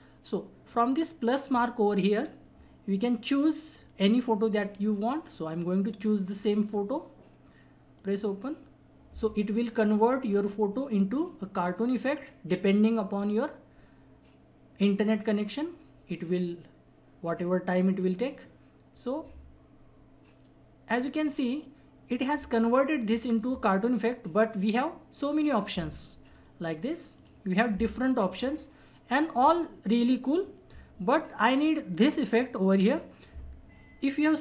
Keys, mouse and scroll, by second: 3.6 click, 6.3 click, 8.5 click, 26.3 click, 28.2 scroll down 1, 29.4 click, 31.9 click.